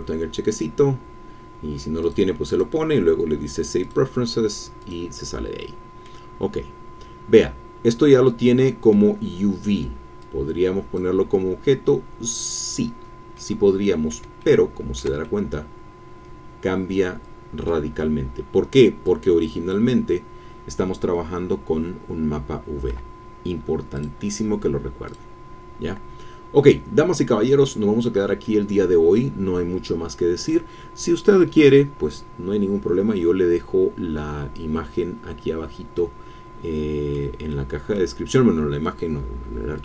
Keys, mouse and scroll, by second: 2.0 click, 4.0 click, 4.8 click, 5.6 click, 7.7-8.3 scroll up 1, 8.3 click, 10.2 click, 13.3 click, 14.4-18.0 shift+drag, 19.0 click, 24.0 click, 26.7-27.9 drag, 28.0 scroll down 1, 28.4-30.7 drag, 36.0-39.8 drag.